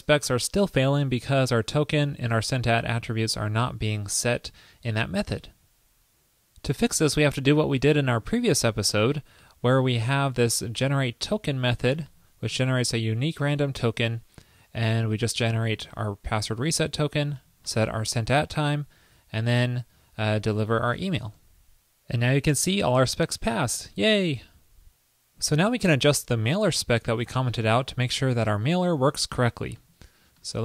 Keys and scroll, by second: 10.7 super+v, 21.5 super+s, 27.2 super+a, 28.1 super+/.